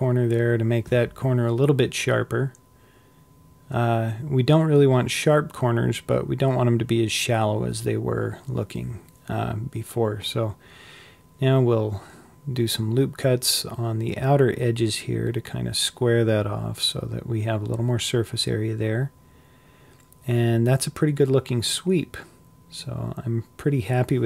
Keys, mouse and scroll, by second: 1.2 ctrl+r, 6.7-7.7 scroll up 2, 7.7-10.1 scroll down 1, 10.1 ctrl+r, 13.2 ctrl+r, 15.6 scroll down 2, 16.0 middle click, 16.5 Tab, 17.0-24.2 middle drag.